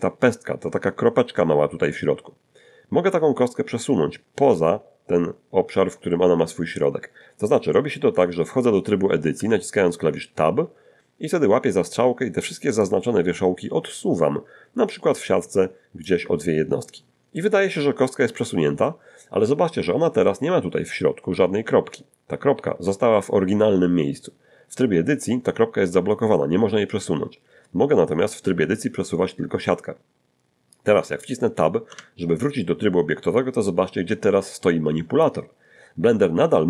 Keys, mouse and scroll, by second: 9.4 Tab, 12.8-16.2 drag, 16.8 ctrl+shift+click, 31.9 Tab.